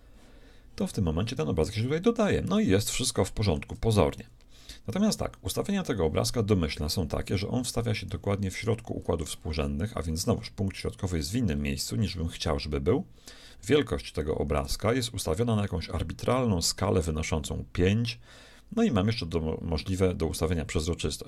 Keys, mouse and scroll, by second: 0.0-1.8 drag, 1.2-3.0 middle drag, 3.4-4.8 shift+middle drag, 11.6-13.4 middle drag, 13.4-13.8 scroll down 1.